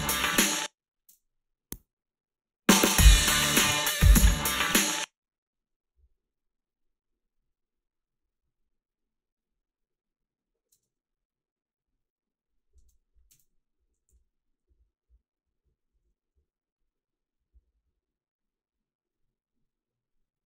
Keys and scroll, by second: 0.4 space, 1.0 space, 4.7 space, 10.7 space, 12.8 space, 13.3 space, 14.1 h, 15.9 a.